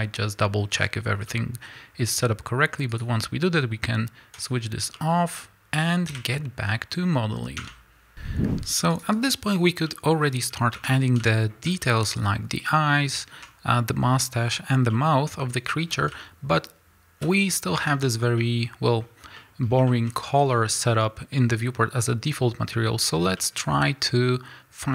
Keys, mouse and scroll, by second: 4.3 click, 4.8 scroll down 2, 4.9-8.1 middle drag, 6.1 KP_1, 7.6 Tab, 8.1 click, 8.1 z, 8.5-9.5 drag, 8.5 z, 9.5-9.9 scroll up 2, 9.9-24.9 middle drag, 10.7 Tab, 11.7 z, 17.2 z, 17.8 Tab, 20.2 scroll up 1, 21.4-23.4 scroll down 2.